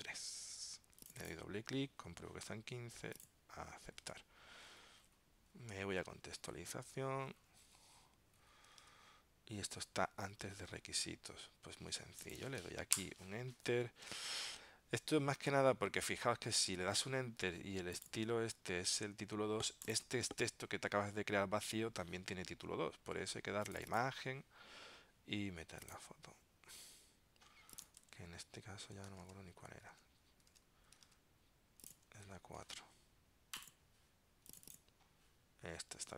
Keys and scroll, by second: 4.1 super+Tab, 6.1 super+Tab, 8.9 super+Tab, 10.5 super+Tab, 29.3 super+Tab.